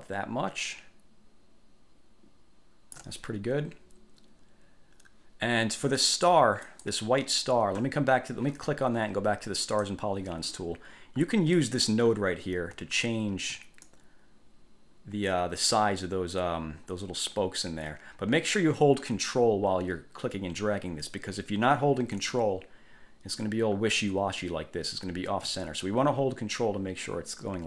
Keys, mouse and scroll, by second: 6.8 click, 9.8 click, 12.5-12.9 ctrl+scroll up 1, 14.1-27.6 ctrl+drag.